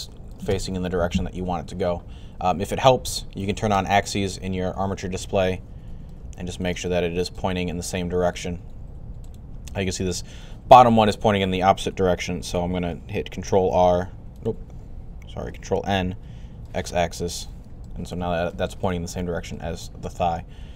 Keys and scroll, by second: 13.5 ctrl+r, 15.4 ctrl+n.